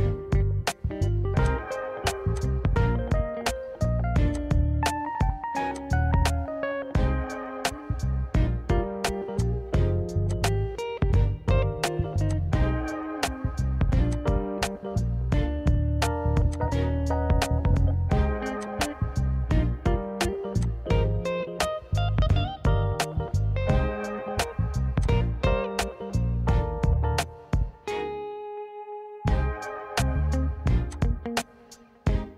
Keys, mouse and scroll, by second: 1.5 click, 2.6 click, 4.4 click, 5.9 click, 7.6-9.0 scroll, 9.0-9.4 scroll, 9.4 click, 10.4 click, 11.6 3, 12.4 click, 12.7-14.2 scroll, 14.2 click, 14.9-16.6 scroll, 16.6 click, 17.1-18.5 scroll, 18.5 scroll, 18.7 click, 19.3-21.2 scroll, 21.2 scroll, 21.6 click, 25.2 click, 31.0 click, 32.0 right click.